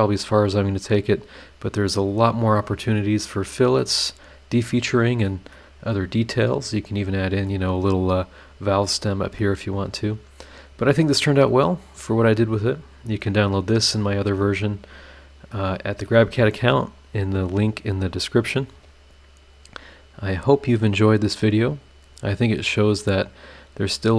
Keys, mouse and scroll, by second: 1.7 scroll up 1, 3.2 scroll down 1, 3.6 scroll up 1, 4.0 scroll down 1, 4.7 click, 5.5-7.6 middle drag, 9.1 scroll down 1, 9.4-11.2 middle drag, 11.3 scroll up 1, 14.8 scroll down 1, 15.5 middle click, 18.4 scroll up 2, 19.6 click, 23.2 click.